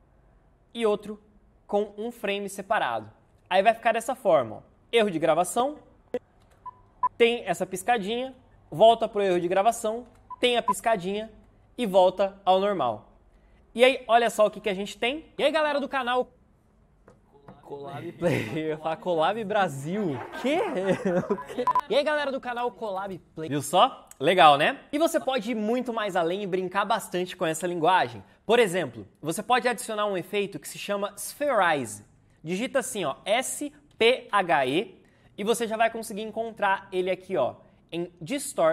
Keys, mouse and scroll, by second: 5.7 Right, 10.0 Right, 15.3 space, 23.2 space, 33.2-35.0 typing.